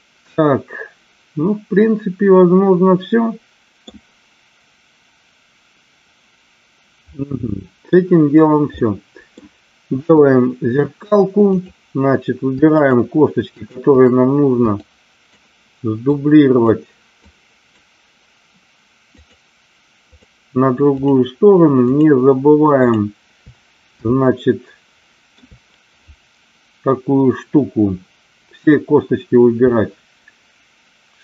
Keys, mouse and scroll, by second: 7.1 middle click, 8.7 middle click, 10.0 KP_1, 11.5 click, 12.8 shift+click, 13.5 shift+click, 14.9 shift+click, 16.1 shift+click, 17.3 shift+click, 19.1 shift+click, 21.8 shift+click, 22.8 shift+click, 24.1-25.2 shift+middle drag.